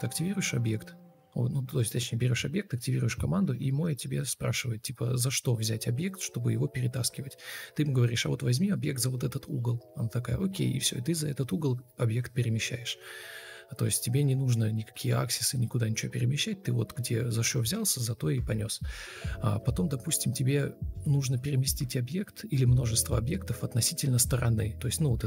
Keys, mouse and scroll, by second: 4.9 r, 8.6 alt+`, 9.7 s, 10.6 Escape, 11.8 ctrl+d, 11.9 Delete, 13.7 ctrl+space, 16.4 ctrl+space, 19.0 ctrl+d, 21.3 Escape, 25.0 Delete.